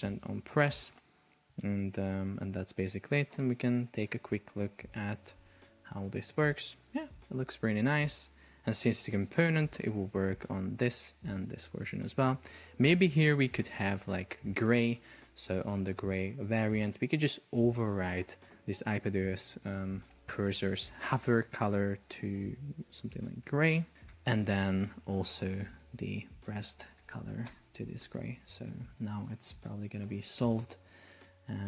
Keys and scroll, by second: 4.8 super+p, 13.4 Escape, 24.3 Return, 25.5 super+a, 25.8 super+c, 27.0 super+v, 27.2 super+a, 27.4 super+v, 27.5 Return, 29.6 super+p.